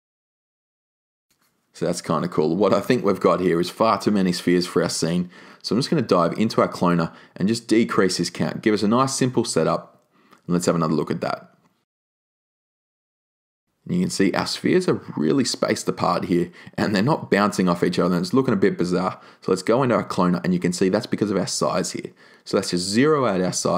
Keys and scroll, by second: 7.7 2, 7.9 Tab, 8.2 2, 8.3 Tab, 8.5 2, 8.9 Tab, 23.0 0, 23.1 Tab, 23.2 0, 23.3 Tab, 23.4 0.